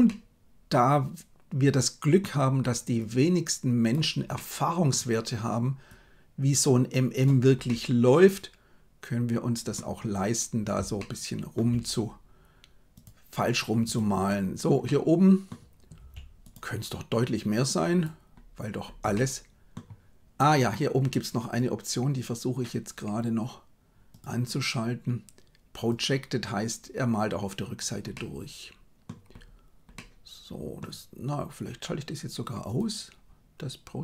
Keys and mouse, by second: 0.0-2.2 middle drag, 2.9 click, 4.3 middle click, 5.9-7.2 drag, 7.6-9.7 middle drag, 10.9 shift+middle click, 12.9 click, 13.8 right click, 14.8 middle click, 15.9 f, 17.2 click, 19.1 middle click, 24.2-27.4 drag, 28.1 middle click, 29.9 middle click, 32.6-34.0 drag.